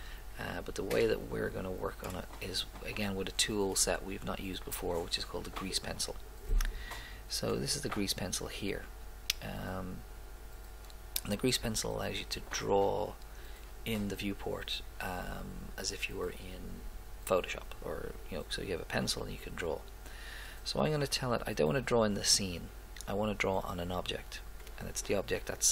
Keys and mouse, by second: 0.2 middle click, 7.6-9.4 drag, 24.7 click.